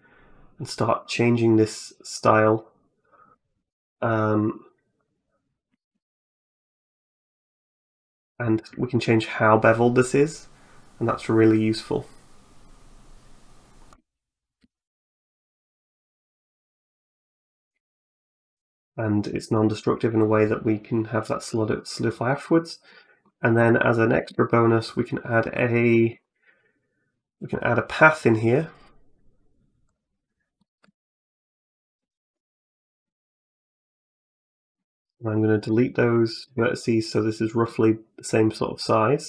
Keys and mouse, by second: 6.3-13.7 shift+drag, 14.8-17.5 shift+drag, 17.8 middle click, 18.4 middle click, 21.2 click, 21.5 click, 22.1 middle click, 22.7 middle click, 23.5 middle click, 24.0 shift+a, 25.9 shift+a, 30.4 middle click, 31.0 middle click, 31.9 Tab, 32.6 click, 33.8 shift+right click, 34.6 x, 36.2 Tab, 37.2 middle click, 38.4 right click, 38.9 right click.